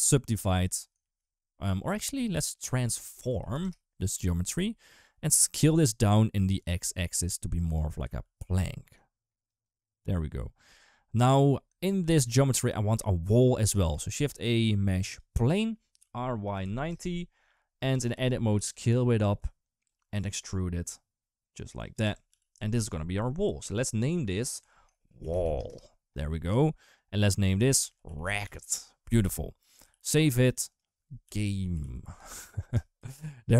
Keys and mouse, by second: 0.8 shift+a, 2.3 shift+a, 6.6 shift+click, 8.0 ctrl+z, 8.7 shift+click, 9.5-11.3 shift+drag, 13.7 shift+a, 15.8 r, 17.8 Tab, 17.9 a, 18.4 s, 20.1 e, 21.8 Tab, 22.1 g, 24.4 F2, 25.2 shift+l, 27.4 F2, 29.8 ctrl+s.